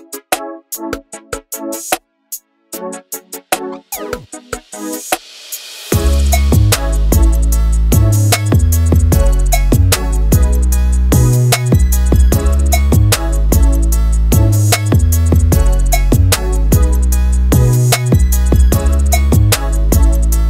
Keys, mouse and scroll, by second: 0.2-1.0 scroll down 6, 1.0-2.9 middle drag, 2.9-3.6 scroll up 7, 3.6-4.2 middle drag, 4.2-4.5 scroll up 3, 4.5-6.5 middle drag, 6.5 click, 9.4 alt+d, 13.8 r, 16.8 s, 20.0 click.